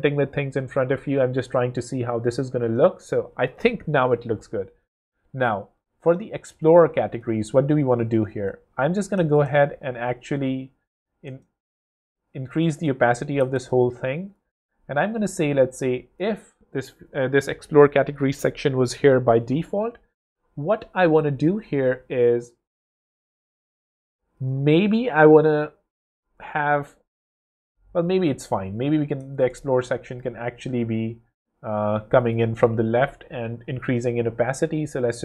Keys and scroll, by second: 8.3 0, 11.2 0, 13.3 0, 14.4 shift+0, 27.6 super+z, 29.2 0, 32.4 w.